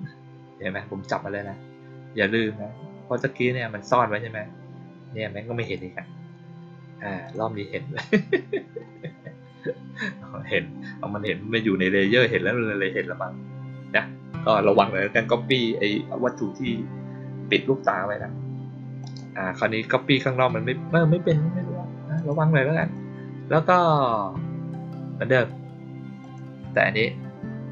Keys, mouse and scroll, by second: 5.5 click, 7.1 click, 7.9 click, 18.9 click, 22.0 click, 22.7 click, 26.1 click.